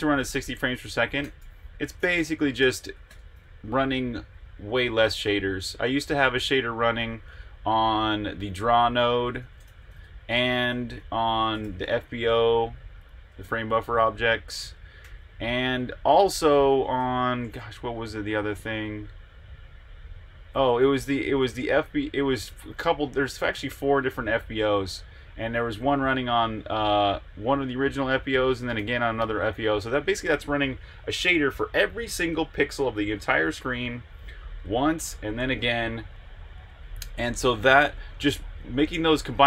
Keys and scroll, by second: 1.0-6.7 typing, 8.3-11.6 typing, 10.0 Escape, 12.9 Escape, 15.0-16.8 typing, 16.9 Return, 20.6-23.0 typing, 28.7 v.